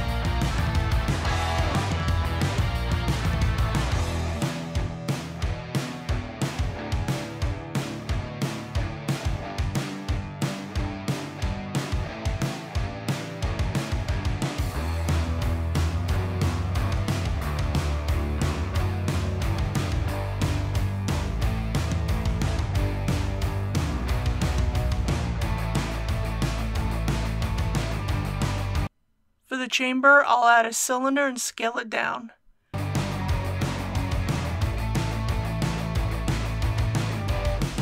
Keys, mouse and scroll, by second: 0.1 shift+click, 0.4 right click, 0.7 click, 1.2 typing, 1.7 click, 2.6 g, 2.8 shift+y, 3.3 click, 4.2 g, 4.4 shift+y, 5.1-6.9 drag, 7.3 middle click, 8.0 3, 8.2 middle click, 8.4 click, 9.0 KP_1, 9.5 s, 9.8 click, 10.4 click, 10.6 middle click, 11.3 2, 11.3 click, 11.5 g, 11.7 shift+y, 12.6 click, 13.1 KP_1, 13.8 2, 14.2 click, 14.5 right click, 15.0 click, 15.4 1, 15.6 click, 16.0 g, 16.1 shift+y, 17.0 click, 17.5 alt+a, 17.7 scroll down 1, 17.8 middle click, 18.3-19.8 typing, 19.7 click, 22.0 Tab, 22.1 alt+a, 22.8 click, 23.5-25.3 typing, 24.6 click, 26.8 click, 27.6 Delete, 27.9 click, 28.9 shift+a, 31.5 click, 36.5-37.4 typing.